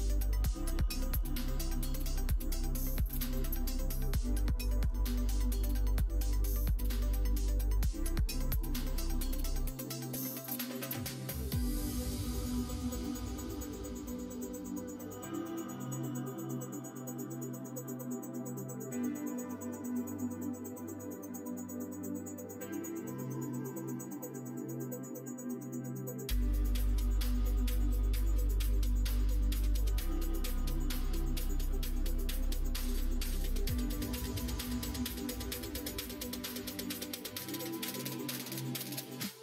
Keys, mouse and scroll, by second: 0.9 middle click, 2.6 click, 3.2 click, 3.5 Tab, 4.5-6.3 middle drag, 7.6 click, 7.8 3, 8.5 click, 9.1 middle click, 9.9 click, 10.6 KP_3, 14.0 ctrl+right click, 15.0-18.4 middle drag, 18.8 g, 20.5 s, 21.5 ctrl+z, 23.2 middle click, 24.4 middle click, 24.7 middle click, 25.5-27.1 middle drag, 27.4 ctrl+middle click, 27.8 ctrl+z, 28.5 middle click, 29.3 ctrl+z, 29.7 ctrl+z, 30.2 middle click, 31.1 middle click, 33.0 2, 33.2 click, 33.5 middle click, 36.0 ctrl+z, 38.3 g.